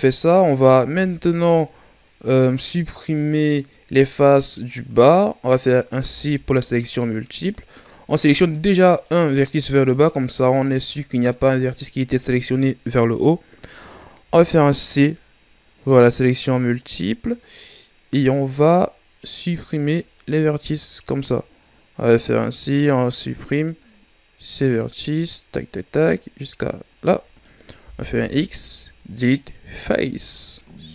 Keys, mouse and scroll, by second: 0.8 z, 5.9 c, 8.9-10.6 right drag, 10.6-12.5 scroll down 2, 13.6-14.2 scroll up 2, 14.2 c, 27.7 x, 30.0 z, 30.7-30.9 scroll down 1.